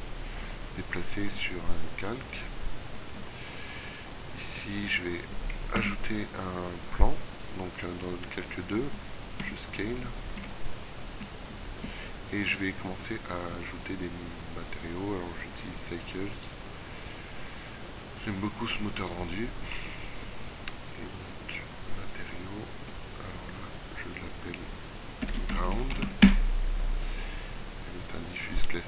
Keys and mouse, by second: 4.9 click, 5.2 shift+a, 9.5 s, 10.4 s, 11.3 s.